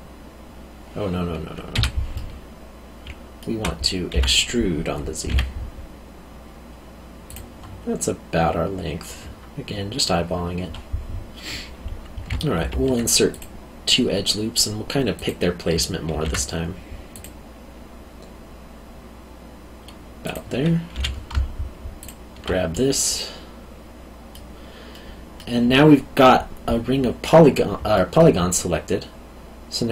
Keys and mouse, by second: 1.7 Escape, 2.1 middle click, 3.0 alt+middle click, 4.1 e, 5.3 z, 7.3 click, 12.5 ctrl+r, 13.3 click, 16.1 ctrl+r, 17.1 click, 20.2 click, 20.9 3, 22.0 alt+click, 22.7 middle click, 24.9 middle click, 27.9 alt+middle click.